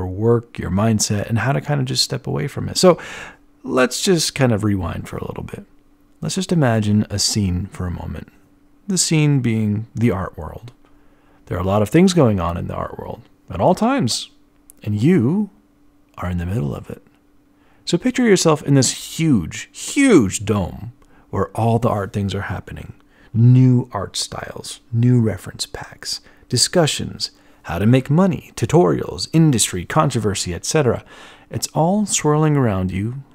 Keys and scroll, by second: 8.2 e, 14.0 b, 17.6 e, 20.1-21.7 typing, 27.1-28.7 typing.